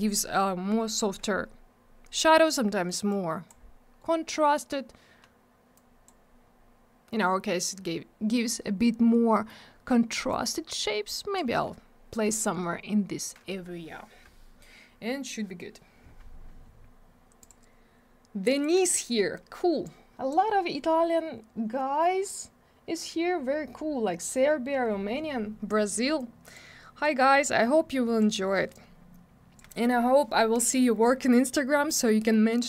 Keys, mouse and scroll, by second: 0.3 scroll down 1, 2.4 middle click, 3.1 click, 5.7 click, 9.3 middle click, 10.3 click, 12.5 scroll down 1, 17.4 click, 18.6 click, 19.8 click, 26.1 click, 27.0 click, 28.7 click.